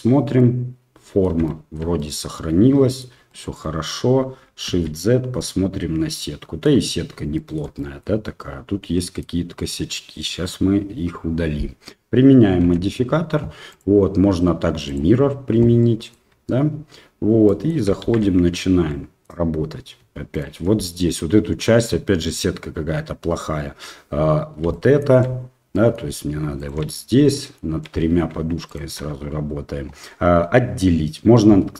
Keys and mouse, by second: 0.3-1.2 middle drag, 1.4-1.7 shift+middle drag, 1.9-3.0 middle drag, 3.2 shift+middle click, 4.6 shift+z, 5.4-6.6 middle drag, 7.3 shift+middle drag, 7.7 middle drag, 8.9 middle drag, 13.0 ctrl+a, 13.7-15.0 drag, 15.8 middle click, 16.3 Tab, 17.4 middle click, 18.0 shift+z, 18.9 middle click, 20.3 alt+right click, 24.7 shift+middle click, 25.7 middle click, 26.6 alt+shift+right click, 27.3 shift+middle click, 28.7 alt+shift+right click, 31.5 v.